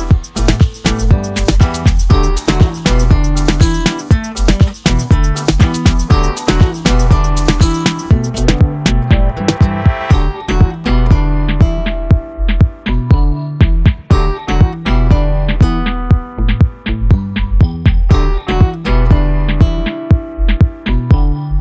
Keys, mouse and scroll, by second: 0.4 middle click, 0.8 click, 1.4-2.0 scroll down 4, 2.0-3.9 middle drag, 3.9 click, 5.0-6.1 drag, 6.4-7.3 middle drag, 7.3 click, 7.8-9.3 drag, 10.1 middle drag, 10.4 z, 10.7 z, 10.8-11.3 shift+middle drag, 11.3 Tab, 11.9 alt+j, 12.2 Tab, 12.5-12.9 scroll up 10, 12.8 click, 13.1 click, 13.7 KP_Decimal, 14.1-14.8 middle drag, 14.8 click, 15.1 Tab, 15.7 alt+j, 15.9 Tab, 16.2 click, 18.0-21.6 drag.